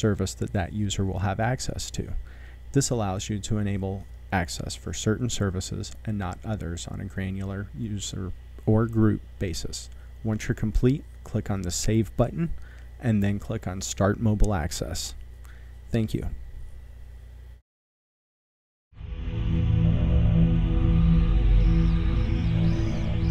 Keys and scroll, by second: 17.7 shift+4.